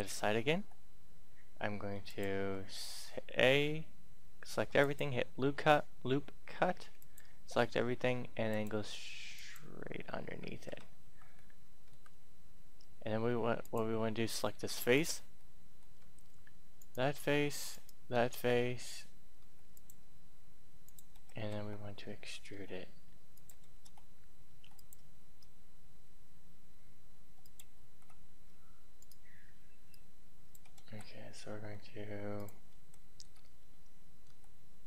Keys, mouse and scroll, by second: 0.7 k, 2.0 click, 2.2 a, 2.5 a, 4.3 k, 4.7 click, 11.0 Tab, 11.3 middle click, 13.6 click, 14.8 right click, 15.3 middle click, 16.8 shift+right click, 17.7 shift+right click, 18.5 middle click, 19.5 e, 19.7 click, 20.7 click, 21.3 ctrl+z, 22.5 s, 23.3 click, 23.6 ctrl+z, 24.3 ctrl+e, 24.7 click, 27.8 ctrl+z, 28.8 right click, 29.7 click, 30.8 ctrl+z, 31.5 ctrl+e, 32.3 click, 32.7 ctrl+z, 34.0 e.